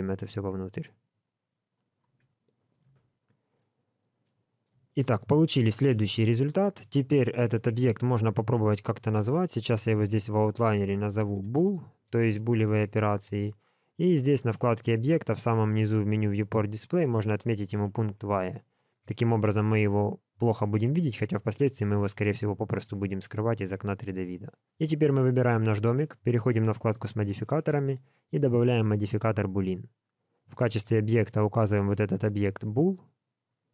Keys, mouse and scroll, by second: 2.2-2.8 scroll down 1, 2.8 Tab, 2.8-3.7 scroll down 4, 3.5 middle click, 4.9 shift+middle click, 5.3-5.9 scroll up 2, 5.9 shift+middle click, 8.1 scroll down 4, 8.7 scroll up 1, 9.8 click, 10.1 click, 11.3 o, 13.9 click, 14.5 scroll down 3, 15.4 click, 15.4-16.6 scroll down 3, 16.6 click, 16.6 scroll down 1, 19.0 alt+a, 19.4 middle click, 20.4 middle click, 22.0-22.9 scroll down 4, 22.9-23.5 scroll up 2, 24.8 click, 26.4 click, 27.4 click, 30.6 click.